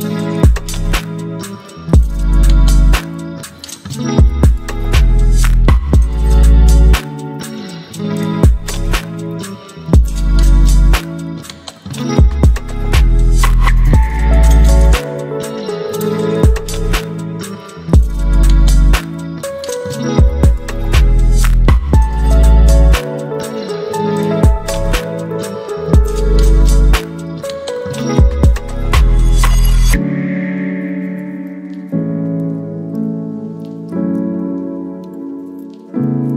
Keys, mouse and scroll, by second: 6.1-10.9 drag, 13.2 click, 14.7-19.7 alt+drag, 19.7 ctrl+t, 22.9 ctrl+t, 23.0-26.7 shift+drag, 28.2 ctrl+click, 28.9 ctrl+click.